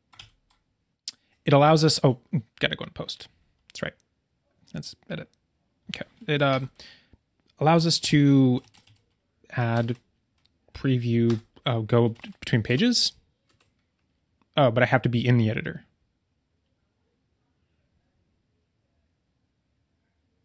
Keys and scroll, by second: 6.5 super+k, 9.7 BackSpace.